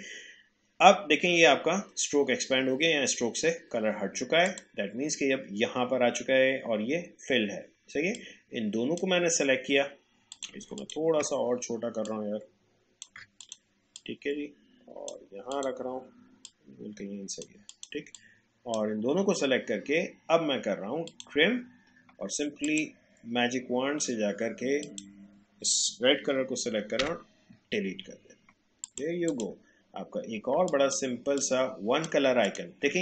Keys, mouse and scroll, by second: 4.5 click, 8.1-10.3 drag, 12.1-21.0 shift+drag, 27.0 Delete, 28.8 click, 29.1 click, 29.8-30.1 alt+scroll down 1, 30.6 space, 30.7 click.